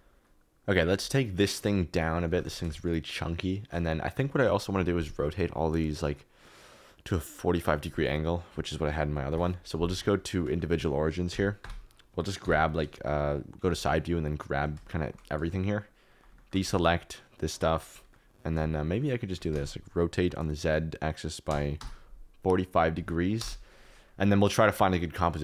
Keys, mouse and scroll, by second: 1.2 KP_Decimal, 2.2 g, 2.4 z, 4.0 middle click, 7.7-9.3 drag, 9.9 middle click, 10.4 click, 10.8 middle click, 11.2 KP_2, 11.6 KP_2, 12.4 KP_3, 13.7 alt+z, 14.0 click, 14.9 shift+click, 15.7 shift+click, 15.8 shift+click, 16.3 shift+click, 18.6 alt+z, 19.3 r, 19.5 z, 21.4 4, 21.7 5, 23.3 KP_0.